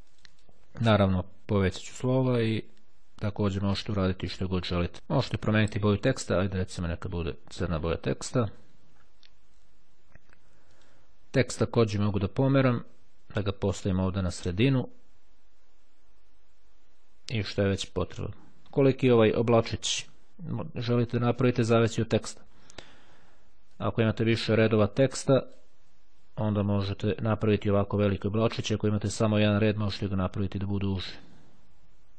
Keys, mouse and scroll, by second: 0.1 click, 2.0-3.3 drag, 3.7-4.9 drag, 6.5 click, 7.9 click, 10.9 click, 12.7-14.9 drag, 23.8-26.2 drag, 26.9 click, 31.1 click.